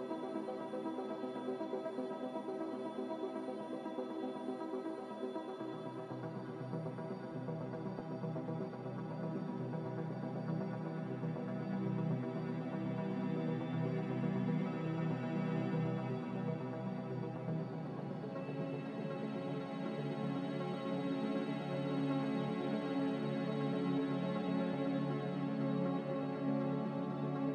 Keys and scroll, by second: 2.7 z, 4.6-5.4 typing, 7.4 typing, 7.7 Return, 14.9-15.7 typing, 17.5 typing, 17.7 Return, 19.9 typing, 20.1 Return, 22.8-23.6 typing, 24.0 Return.